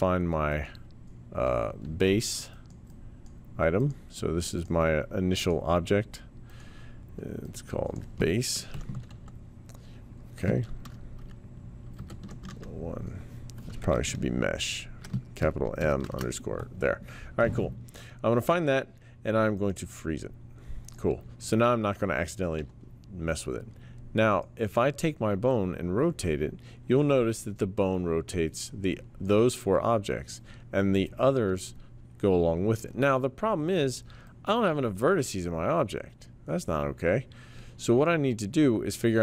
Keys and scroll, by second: 8.5-13.0 typing, 13.9-15.0 Left, 14.2-15.9 typing, 16.0 Return, 22.5 e.